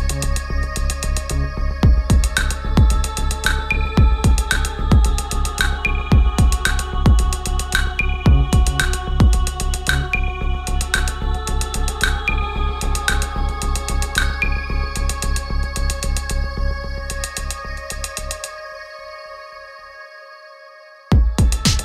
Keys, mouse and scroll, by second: 4.0 click, 18.6 space, 19.4 click, 21.1 F4.